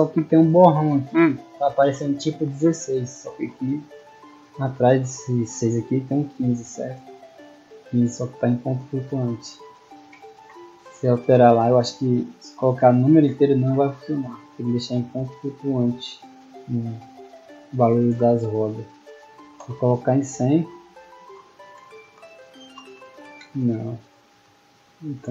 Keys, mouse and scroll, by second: 2.5 a, 9.7 d, 10.5 a, 11.2 d, 12.2 d, 15.0 click, 19.8-23.2 typing.